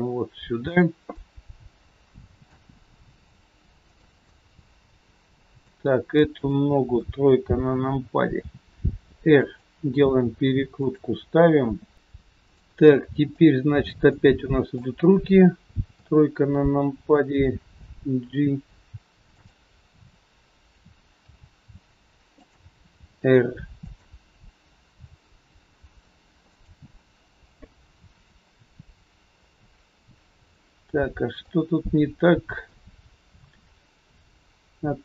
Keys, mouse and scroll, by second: 1.0 middle click, 3.0 g, 4.2 middle click, 6.3 click, 6.9 KP_3, 8.4 r, 10.0 g, 12.0 click, 12.4 shift+click, 13.2 shift+click, 14.1 middle click, 15.8 KP_3, 16.6-16.9 scroll down 2, 17.8 g, 30.4 middle click.